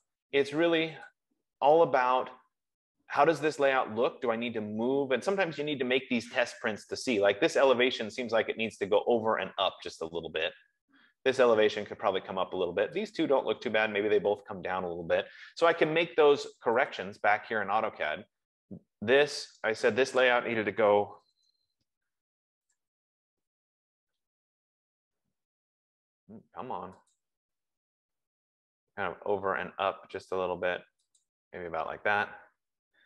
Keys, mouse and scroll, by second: 0.6 click, 1.6 click, 16.5 Escape, 17.5 click, 20.0 click, 20.6 click, 21.1 F15, 21.4-22.2 typing, 24.4 typing, 24.6 click, 27.7 click, 31.5 click.